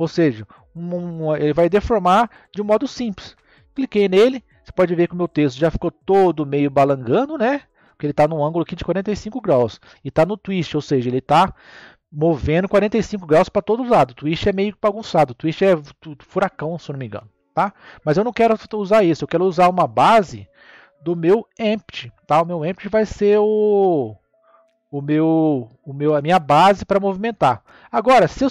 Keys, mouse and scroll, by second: 4.5-5.3 middle drag, 5.3-6.2 scroll up 1, 6.2-9.2 middle drag, 20.0-23.1 drag, 23.8-26.8 middle drag, 28.4 click.